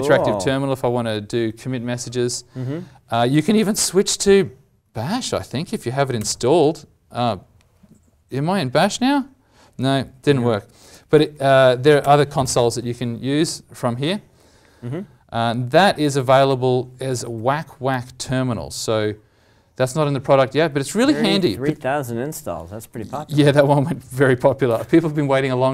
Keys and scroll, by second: 17.3 alt+Tab, 20.9 alt+Tab, 22.9 alt+Tab.